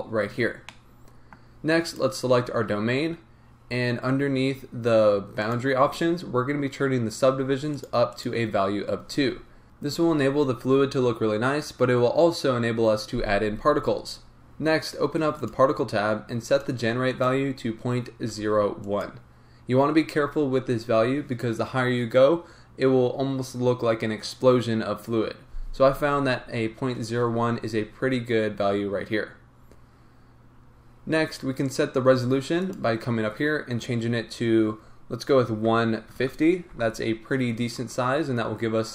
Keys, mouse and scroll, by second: 0.7-1.8 middle drag, 1.8 click, 3.6-5.4 scroll down 1, 5.4 click, 5.8-7.3 scroll down 1, 7.7 click, 14.3-15.5 drag, 15.7-16.5 scroll down 1, 16.5-19.0 drag, 29.2-30.5 scroll down 1, 30.5-32.6 scroll up 1, 32.6-38.9 drag, 36.8 Return.